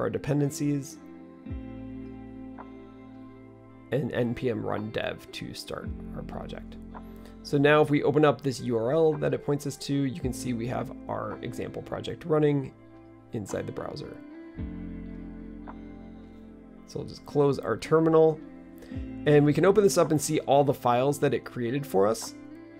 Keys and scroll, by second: 0.0-0.6 typing, 3.2-5.1 typing.